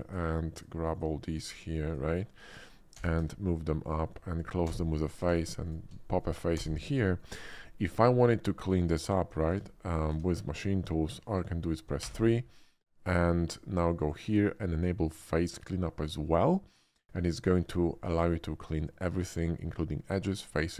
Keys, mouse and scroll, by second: 0.5 ctrl+click, 0.9 ctrl+click, 1.9 ctrl+click, 2.9 e, 3.1 z, 3.8 click, 4.7 f, 4.9 middle click, 5.1 Tab, 5.3 f, 5.6 f, 5.6 alt+click, 6.0 alt+middle click, 6.5 f, 7.0 middle click, 7.6 shift+middle click, 7.9 shift+middle click, 9.4 Tab, 12.0 3, 13.9 click, 15.3 click, 18.1-19.6 middle drag, 20.4 middle click.